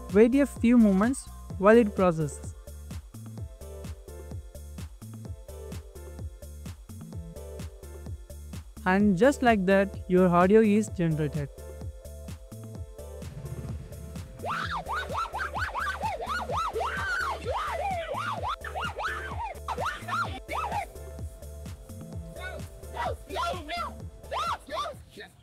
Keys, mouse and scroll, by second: 3.3 middle click, 4.3 scroll up 1, 5.3 middle click, 12.3-13.1 scroll up 1.